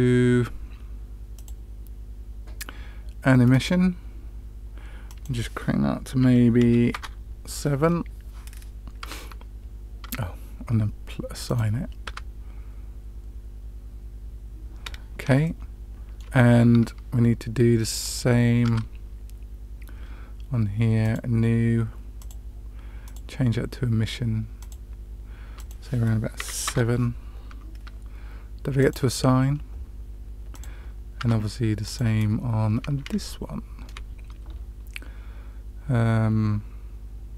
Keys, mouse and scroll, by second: 1.3-4.0 drag, 5.0-7.6 drag, 9.3 Tab, 10.4 Tab, 11.4 click, 12.5 Tab, 15.4-16.1 shift+middle drag, 18.0 click, 18.6 Tab, 21.0 drag, 22.1 click, 23.0-24.8 drag, 25.5-27.9 drag, 28.8-29.3 drag, 30.4 click, 31.5 Tab, 31.8 click, 33.1-33.8 shift+middle drag.